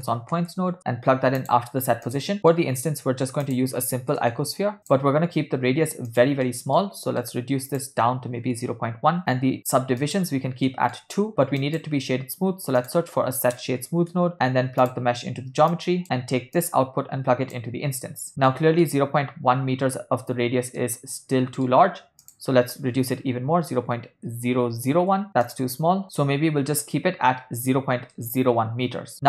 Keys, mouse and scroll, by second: 2.4 middle click, 2.4 click, 2.8 shift+a, 6.5 ctrl+middle click, 7.1 middle drag, 7.8-9.2 drag, 10.3 click, 10.7 middle click, 11.6 click, 12.1 shift+a, 15.7 drag, 16.0 middle click, 16.6-18.1 drag, 18.6 middle click, 20.9-21.8 ctrl+middle drag, 22.4-25.3 drag, 23.6 0, 25.5 click, 26.2 click, 28.2-29.1 middle drag.